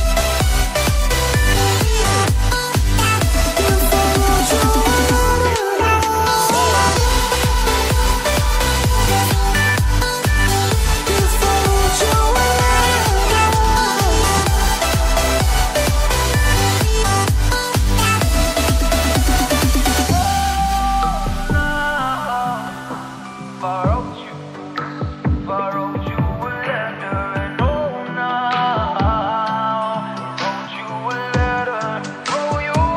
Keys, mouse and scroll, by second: 3.3 scroll down 1, 3.7-5.0 scroll up 1, 5.0 click, 7.0 double click, 8.2 click, 9.7-10.1 scroll down 1, 10.1-11.1 scroll up 1, 11.2 click, 15.7 scroll down 1, 15.9-16.5 scroll up 1, 17.5 click, 19.4-20.4 scroll up 1, 20.4 click, 21.4-21.8 scroll down 1, 22.0-23.3 scroll up 1, 23.3 click, 25.4 scroll down 1, 26.2 scroll up 1, 27.2 click, 32.3 double click.